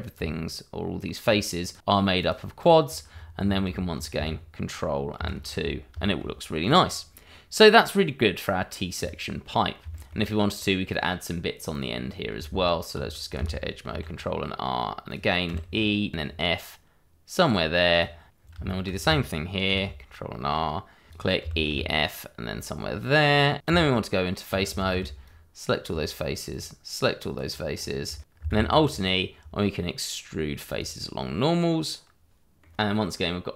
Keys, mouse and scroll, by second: 0.1 Tab, 1.6 click, 2.2 click, 2.7 double click, 3.1-3.4 scroll down 1, 3.7 Tab, 4.2 ctrl+middle click, 5.1 ctrl+2, 6.0 shift+middle click, 6.6 click, 6.8-7.5 scroll down 1, 7.5 middle click, 9.0 click, 9.4 middle click, 10.1-11.7 scroll up 1, 11.7 click, 12.0-12.4 scroll up 1, 12.4 Tab, 13.8 ctrl+r, 15.0 click, 15.4 e, 16.1 f, 17.9 click, 18.3 scroll down 1, 18.6 shift+middle click, 19.6 ctrl+r, 21.1 click, 21.4 e, 21.7 f, 23.1 click, 23.5 shift+middle click, 23.6 Tab, 24.8 shift+z, 25.2 click, 26.5 shift+click, 27.2 click, 27.7-28.0 scroll up 1, 28.1 shift+middle click, 28.5 alt+e, 30.6 click, 32.5 Tab, 32.8 scroll up 1, 33.1 middle click.